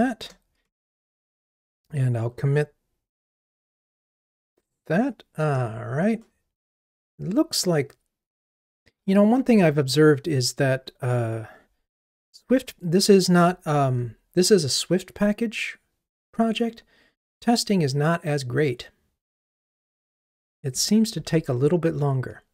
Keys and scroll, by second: 0.9 ctrl+r, 13.9 super+1, 20.8 super+1.